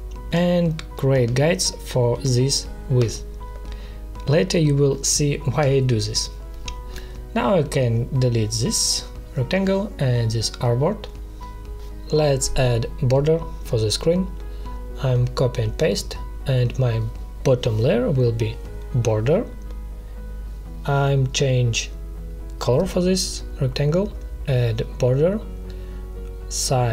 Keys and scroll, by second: 7.8 Delete, 9.2 space, 11.2 Delete, 15.1 ctrl+c, 15.5 ctrl+v, 19.4-20.1 typing, 20.9 Return.